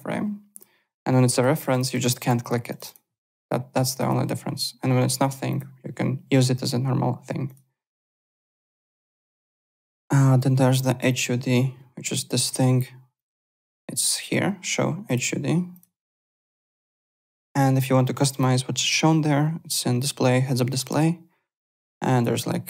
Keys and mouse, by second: 0.5 click, 1.3 click, 4.0 click, 5.5 click, 7.4 click, 8.1 click, 8.9 click, 10.7 click, 13.1 click, 15.0 click, 15.7 click, 16.7 click, 18.3 click.